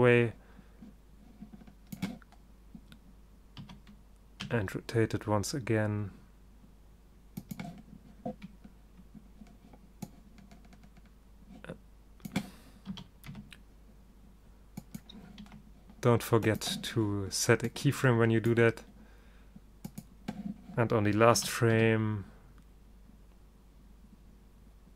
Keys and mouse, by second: 3.7 r, 13.0 r, 15.6 i, 17.8-19.0 middle drag, 19.7 middle click, 21.5 r, 21.9-23.2 middle drag.